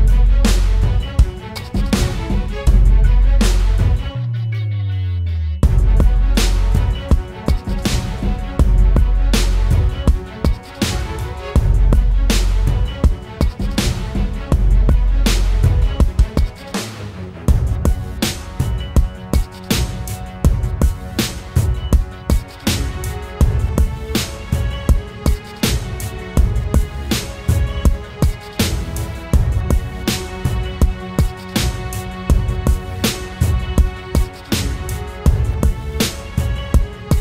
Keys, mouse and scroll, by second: 2.8 alt+shift+click, 6.0 Return, 12.5 shift+click, 13.9 shift+click, 15.4 shift+click, 16.1 shift+click, 16.3 shift+click, 17.8 shift+click, 28.7 ctrl+t, 32.7 alt+shift+click, 34.2 alt+shift+click.